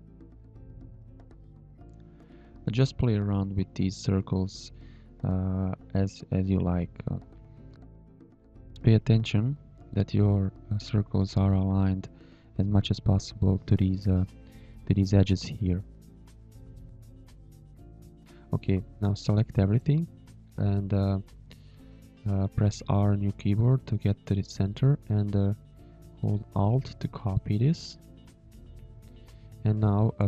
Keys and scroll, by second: 2.5 Up, 4.3 v, 6.0 space, 7.5 space, 10.7 Tab, 10.8 space, 11.3 z, 11.4 space, 13.0 shift+a, 14.6 shift+a, 15.5 z, 15.8 space, 16.2 shift+a, 17.4 shift+a, 20.1 space.